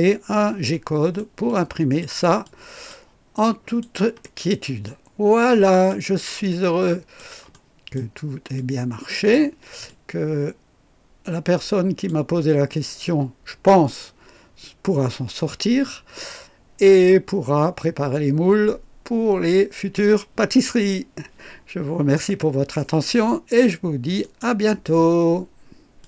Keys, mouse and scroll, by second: 0.0 scroll up 1, 0.7-1.3 right drag, 1.4-2.2 drag, 2.4 click, 3.3-4.0 drag, 4.2 right click, 4.8 click, 6.4 click, 7.5 right click, 8.5-9.5 drag, 9.8-12.2 drag, 24.2 right click, 26.0 click.